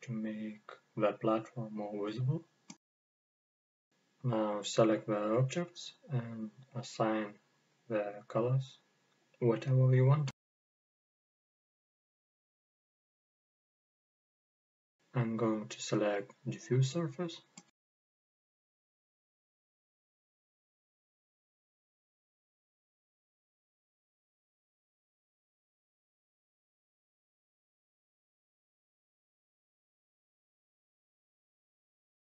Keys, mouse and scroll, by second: 1.4 click, 4.2-4.5 scroll down 1, 4.5-6.4 middle drag, 6.4 right click, 7.2-10.7 middle drag, 10.7-11.5 right drag, 11.5 click, 13.8 click, 14.9-15.4 drag, 16.6-20.1 drag, 24.0-26.8 middle drag, 24.6-25.0 scroll up 2, 26.8 click, 28.1-28.5 drag, 29.8-32.2 drag.